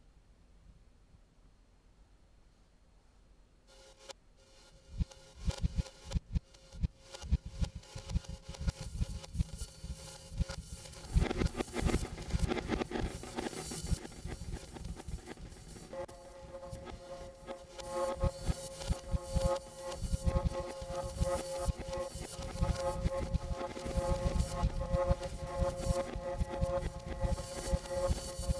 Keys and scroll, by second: 2.8 w, 2.9 space, 16.1 w, 25.0 shift+super+r, 27.0 shift+Return.